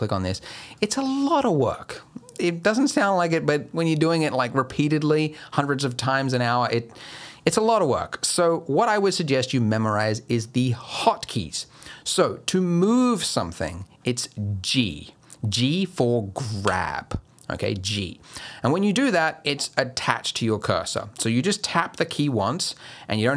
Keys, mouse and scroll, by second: 0.3 click, 0.8 click, 16.6 g.